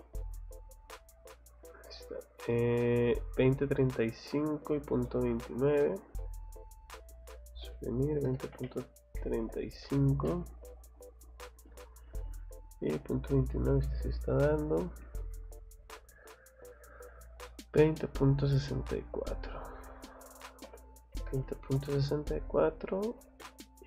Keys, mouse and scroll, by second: 0.4 click, 0.7 click, 1.1 click, 1.3 click, 1.5 Escape, 1.9 middle click, 2.5 middle click, 3.1 scroll up 1, 3.5 scroll down 1, 4.0 scroll up 1, 4.7 scroll down 1, 5.0 middle click, 5.4 scroll up 1, 6.2 click, 6.4 click, 11.2 scroll down 1, 11.6 click, 11.9 scroll up 2, 13.5 scroll down 2, 13.8 middle click, 14.6 Escape, 15.7 scroll down 2, 16.3 scroll up 2, 17.5 middle click, 17.8 middle click, 19.0 click, 22.5 click, 22.9 scroll down 1, 23.6 scroll up 1.